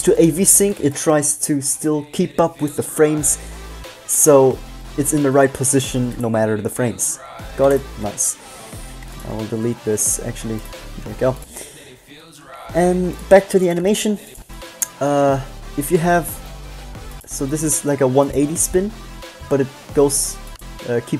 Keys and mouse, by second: 0.5 click, 1.7 middle click, 6.4 click, 8.0 x, 9.4 x, 10.4 Tab, 10.8 x, 14.2-15.2 middle drag.